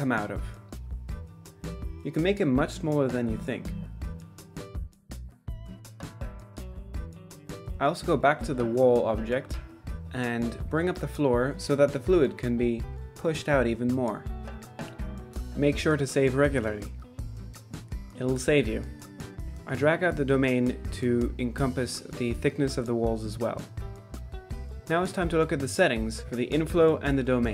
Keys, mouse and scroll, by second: 0.0-5.1 typing, 0.7 middle drag, 1.2 middle click, 1.6 middle click, 1.9 middle drag, 2.2 middle drag, 2.3 click, 2.6 Tab, 6.8 Tab, 7.0 click, 7.4 g, 8.6 Tab, 8.8 Tab, 8.9 middle drag, 9.3-11.2 typing, 10.0 middle drag, 11.4-12.1 middle drag, 12.3 ctrl+z, 12.3 middle click, 12.7 middle click, 12.9 click, 13.0 middle click, 13.1 z, 13.1 shift+click, 13.4 ctrl+a, 13.5 middle click, 13.7 z, 13.8 shift+middle click, 14.2 click, 14.6 click, 14.7 drag, 14.9 drag, 15.3 drag, 15.8 shift+middle drag, 16.1 middle click, 16.2 z, 16.3 middle drag, 16.7 middle drag, 17.3 shift+middle click, 18.0 click, 18.6 ctrl+shift+s, 19.9 click, 22.5 z, 22.6 middle click, 22.7 middle click, 23.0 click, 23.1 click, 23.6 ctrl+s, 23.8 middle click, 24.1-25.9 typing, 24.5 Tab, 24.6 click, 24.7 middle click, 25.3 Tab, 25.4 shift+middle click, 25.9 middle drag, 26.1 shift+middle click, 26.3 shift+middle click, 26.5-27.2 middle drag, 27.3 shift+middle click.